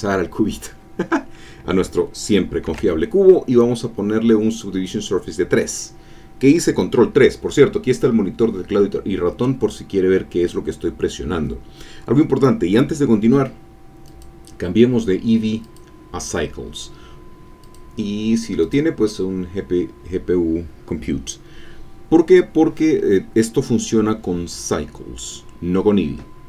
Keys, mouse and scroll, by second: 2.7 ctrl+3, 14.0 click, 15.6 click, 17.6 click, 18.6 click.